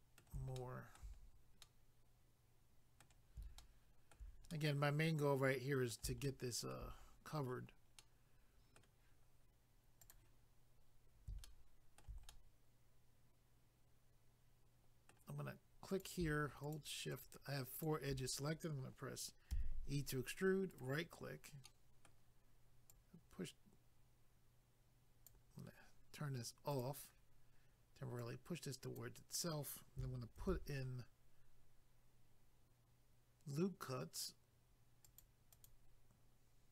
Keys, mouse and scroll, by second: 0.6 shift+middle click, 1.2 scroll down 1, 1.6 middle click, 3.6 shift+middle click, 4.5 middle click, 6.2 shift+middle click, 7.0 scroll up 1, 10.0 click, 10.1 click, 11.4 shift+middle click, 12.3 middle click, 15.9 click, 16.0 click, 16.6 shift+click, 17.1 shift+click, 17.8 shift+click, 20.7 right click, 21.2-21.7 scroll down 1, 21.7 middle click, 22.9 click, 26.7 click, 26.8 click, 28.2 click, 30.4 ctrl+r, 30.9 scroll up 1, 35.0 click, 35.2 click, 35.5 click, 35.7 double click.